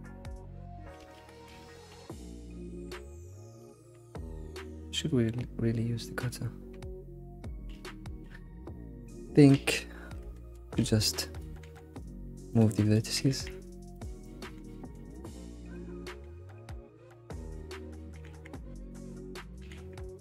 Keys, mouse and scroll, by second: 1.0 alt+x, 1.6 alt+x, 2.0 alt+x, 2.4 alt+x, 3.1-3.9 shift+middle drag, 3.9 scroll down 2, 7.8 alt+x, 8.3 alt+x, 10.5 alt+x, 10.6 Tab, 11.0 click, 12.5 g, 12.9 click, 13.1 g, 14.2 click, 14.6 g, 15.5 click, 17.4 g, 17.7 click, 19.1 click.